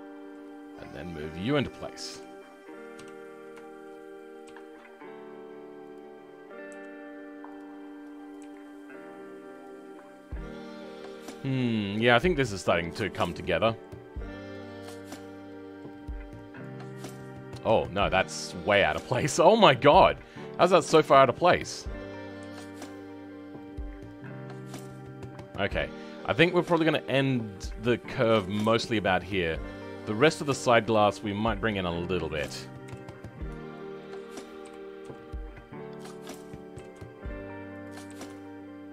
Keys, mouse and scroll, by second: 2.1 KP_5, 2.9 KP_7, 3.6 shift+middle click, 4.4 g, 8.4 g, 13.0-15.0 middle drag, 15.0 click, 15.5-16.6 middle drag, 16.6 click, 16.8-31.8 middle drag, 31.8 click, 32.1 middle click, 32.8 KP_1, 33.7 shift+middle click, 34.7 g.